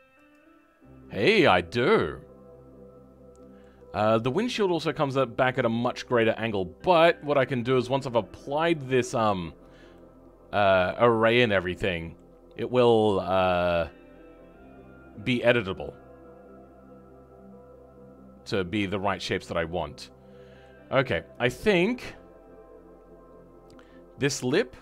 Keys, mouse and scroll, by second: 0.2 click, 0.9-1.2 scroll down 2, 1.2-6.1 middle drag, 6.1 scroll up 2, 6.5-19.4 middle drag, 19.4-19.7 scroll up 2, 19.7-21.0 middle drag, 21.0 scroll down 2, 21.4-23.9 middle drag, 23.9-24.4 scroll up 4, 24.4-24.8 shift+middle drag.